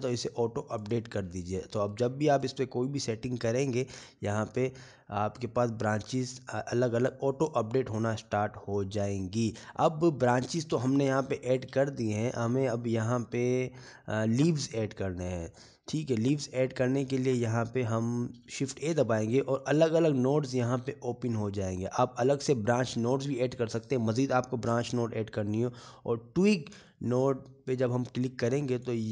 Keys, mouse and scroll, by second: 2.9 click, 3.5 scroll down 2, 3.9 middle click, 4.8 scroll up 2, 5.9 click, 6.9-7.8 scroll up 1, 9.0 middle click, 12.8 shift+middle click, 15.3 middle click, 18.0 click, 18.9 middle click, 20.7 shift+a.